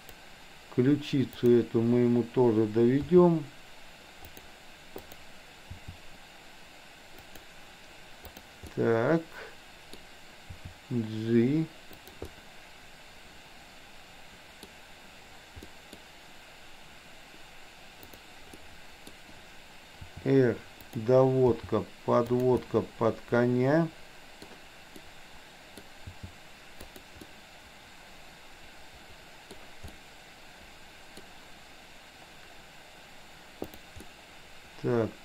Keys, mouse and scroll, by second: 1.3 click, 3.1 r, 5.1 click, 5.8 r, 8.2 click, 8.7-9.9 middle drag, 10.6 r, 12.3-14.7 middle drag, 15.7-16.1 middle drag, 18.1 click, 18.6-19.2 middle drag, 20.1 r, 21.6 g, 22.7 scroll up 1, 22.8-24.4 middle drag, 24.9 scroll up 1, 25.2 middle click, 25.8 scroll down 1, 26.1 g, 27.3-29.6 middle drag, 29.6 scroll down 1, 29.9 scroll up 1, 30.1-31.2 middle drag, 34.1-35.2 middle drag.